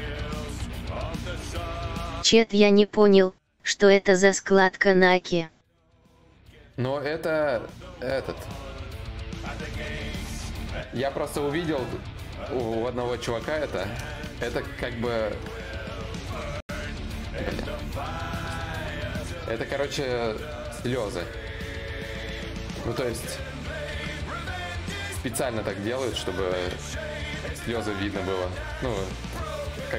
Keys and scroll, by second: 15.9 d, 16.9 alt+Tab, 18.1 d, 18.5 d, 20.1 4.